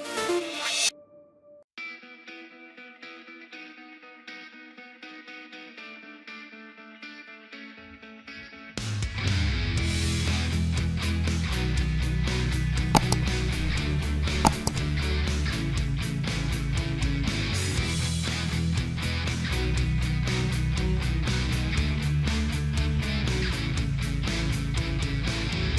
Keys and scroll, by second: 18.4 shift+x.